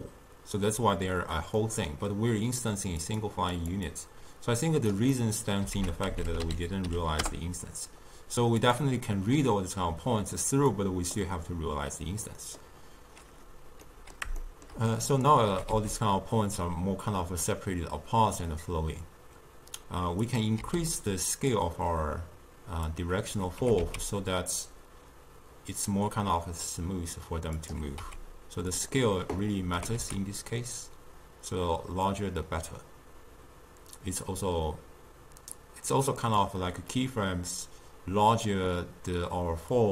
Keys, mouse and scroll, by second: 1.7-3.1 middle drag, 3.1 click, 3.6 click, 4.0-5.2 drag, 5.2 middle click, 5.8 ctrl+a, 10.8-12.4 drag, 12.4-15.2 middle drag, 15.2 click, 15.6 g, 20.7 s, 23.0 click, 23.7 g, 28.0 s, 29.8 g, 39.8 click.